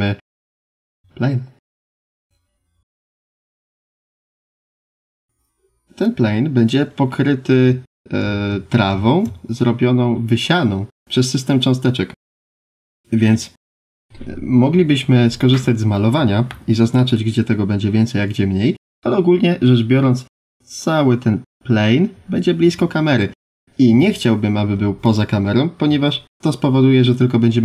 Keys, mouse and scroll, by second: 1.2 shift+middle click, 2.8 click, 4.5 scroll down 1, 6.0 click, 6.9 scroll up 4, 8.5-9.5 scroll down 4, 12.1 click, 19.3 scroll up 2, 19.8 scroll down 1, 23.8 Tab, 24.5 2, 25.0 click, 27.1 click.